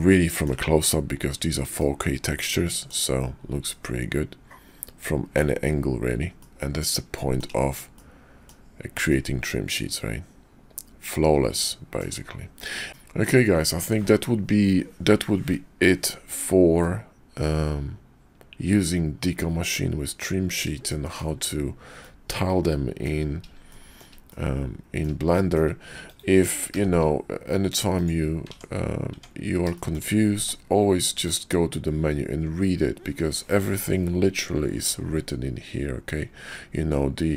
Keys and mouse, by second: 1.8-2.9 drag, 3.7-5.3 middle drag, 6.5-6.8 middle drag, 7.2 shift+drag, 8.0-8.5 middle drag, 9.1-12.0 middle drag, 12.9 shift+n, 16.8-17.2 drag, 17.2-20.2 middle drag, 20.9 shift+middle drag, 22.1-23.0 middle drag, 23.7 shift+drag, 24.3-25.0 drag, 25.3 shift+drag, 28.4 Tab, 29.1 Tab, 29.7 shift+middle click, 30.1-36.5 drag, 30.4 d.